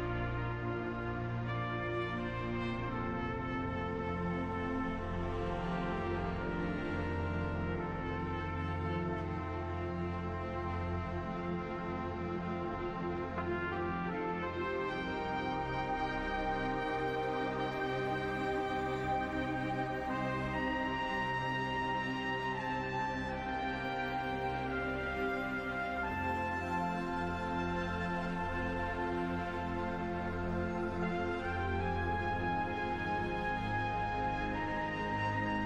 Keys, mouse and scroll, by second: 0.7 ctrl+z, 1.0-2.4 middle drag, 2.4-5.1 drag, 5.2-7.0 middle drag, 7.0 ctrl+z, 7.0-8.1 middle drag, 8.1-10.8 drag, 12.4-14.6 middle drag, 14.6-17.1 drag, 20.1-23.8 drag, 24.5-26.0 middle drag, 26.0-28.8 drag, 29.6-31.1 middle drag, 31.1-33.6 drag, 34.3-35.6 middle drag.